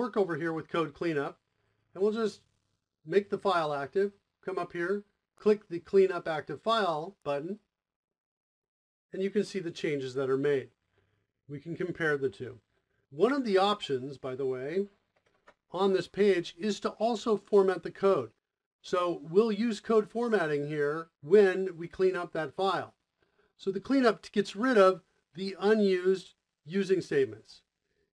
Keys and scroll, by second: 22.3 o.